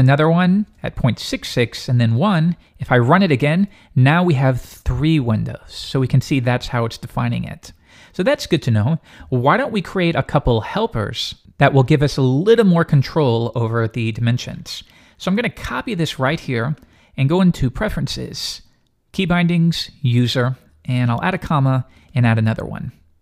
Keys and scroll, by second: 3.3 alt+super+2.